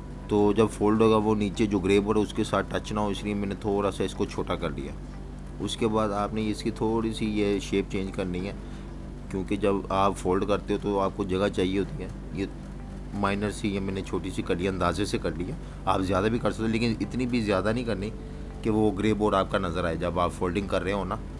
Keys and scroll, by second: 1.2 z, 2.7 v, 13.3 v, 13.7 super+-, 15.2 typing, 17.2 v, 19.0 super+-, 19.1 super+-, 19.6 typing.